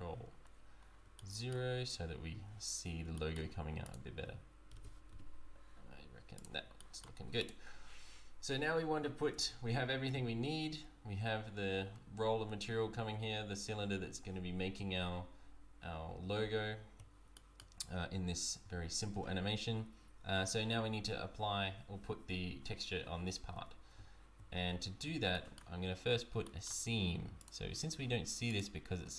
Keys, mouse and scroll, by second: 1.1 shift+middle click, 2.8 scroll up 1, 3.1 shift+middle click, 3.8 click, 4.7 g, 6.7 shift+middle click, 7.4 click, 9.7 z, 16.5 z, 17.3 shift+middle click, 17.8 scroll up 1, 23.5 Tab, 23.9 z, 24.7 z, 25.3 shift+middle click, 25.7-26.4 scroll up 5, 26.4 shift+middle click, 27.4 click, 28.5 shift+click.